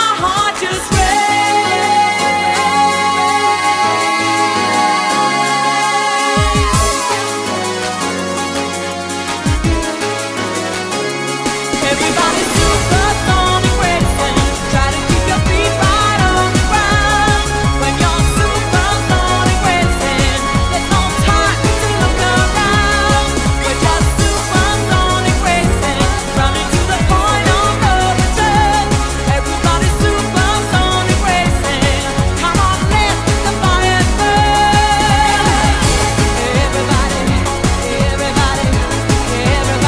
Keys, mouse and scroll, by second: 3.1 click, 3.9-15.2 click, 15.1 click.